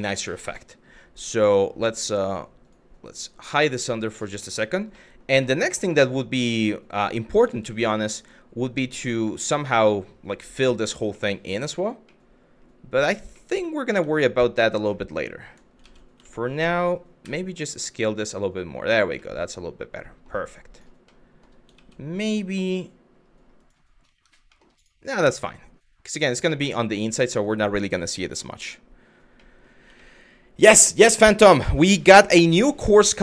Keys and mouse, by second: 1.1 click, 3.1 click, 3.6 middle click, 4.1 shift+middle click, 4.7 middle click, 5.1 shift+middle click, 5.6-6.8 middle drag, 7.3-8.6 middle drag, 9.4 middle click, 10.7 middle click, 11.3 shift+middle click, 11.8 middle click, 13.0 middle click, 13.5 Tab, 14.6 middle click, 15.5 ctrl+z, 15.9 shift+middle click, 16.9 s, 18.5 click, 18.8-19.9 middle drag, 20.7 middle click, 21.4 ctrl+z, 22.2 g, 23.7 Tab, 24.1 middle click, 24.4 click, 25.0 middle click, 25.7 click, 26.4-26.8 middle drag, 27.0 click, 28.0-28.3 middle drag, 29.1 middle drag, 29.6 shift+middle drag.